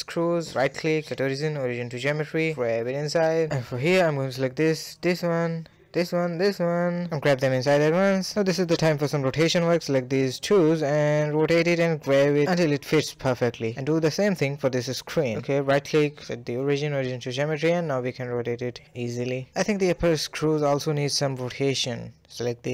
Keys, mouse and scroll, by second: 0.0 shift+click, 0.3 scroll down 1, 0.5-1.1 middle drag, 1.1-2.4 right drag, 2.4 g, 2.9-3.7 middle drag, 3.7 click, 3.7-4.1 scroll down 1, 4.1-4.9 middle drag, 4.9 shift+click, 5.4-6.0 middle drag, 6.0 shift+click, 6.4 shift+click, 7.1 g, 8.0 click, 8.6 shift+click, 8.7 ctrl+KP_3, 9.2 KP_Decimal, 9.4 scroll up 2, 9.4-10.2 shift+middle drag, 10.2 r, 10.5 g, 10.7 scroll down 1, 10.9-11.7 middle drag, 11.7 scroll down 2, 11.9-12.6 shift+middle drag, 12.6 click, 12.8 KP_3, 12.9 scroll up 1, 13.0-13.5 shift+middle drag, 13.5 g, 14.2 r, 15.8-16.3 right drag, 16.3 r, 16.7 g, 17.2 r, 17.7 g, 18.3-18.8 middle drag, 18.8-19.4 scroll down 4, 19.4-21.4 middle drag, 21.4-22.0 scroll up 1, 22.0 click.